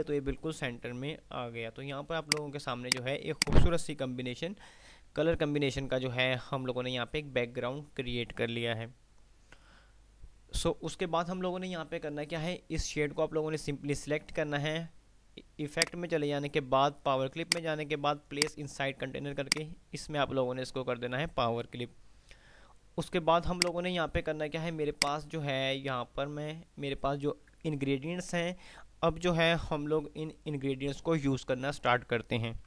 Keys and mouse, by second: 2.5 click, 6.3 typing, 15.8 click, 22.7 F3, 23.8 click, 24.5 typing.